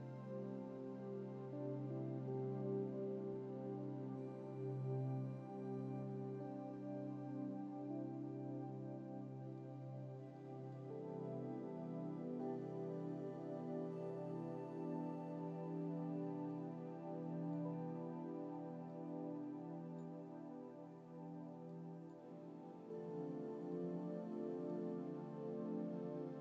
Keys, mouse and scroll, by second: 9.8-11.1 middle drag, 16.8-17.9 middle drag, 19.1-20.4 middle drag, 20.9-21.6 scroll down 2, 22.0 middle click, 23.2-23.9 scroll up 1, 23.9-25.1 middle drag, 25.3 scroll up 1.